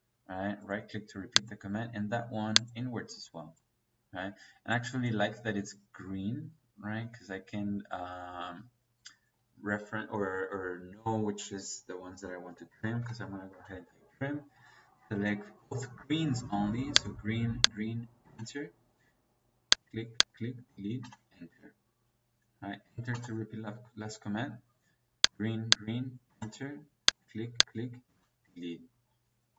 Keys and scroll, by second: 10.6 Escape, 12.6-13.4 typing, 18.1 space, 20.9 -, 23.0 -, 26.2 -, 28.0 space.